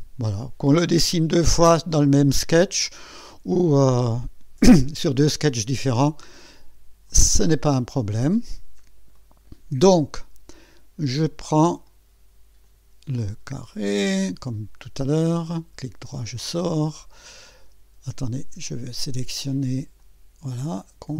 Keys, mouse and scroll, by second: 6.1 click, 7.1 click, 8.5 scroll up 1, 9.2 right click, 10.2 scroll up 1, 11.8 click, 12.7 click, 13.7 click, 14.4 scroll up 1, 15.3 right click, 16.7 click, 18.2 click, 20.0 click.